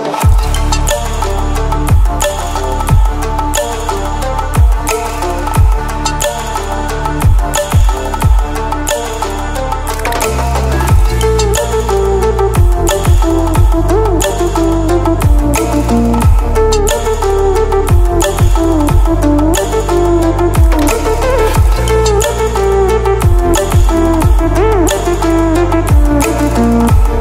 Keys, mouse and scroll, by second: 4.5-6.1 ctrl+alt+scroll down 2, 6.1 ctrl+alt+scroll down 1, 6.7 ctrl+alt+scroll up 1, 8.5-14.3 drag, 18.4-19.3 ctrl+alt+scroll up 2, 19.3-20.3 drag, 25.3-25.7 ctrl+alt+scroll up 2, 25.8-27.1 click.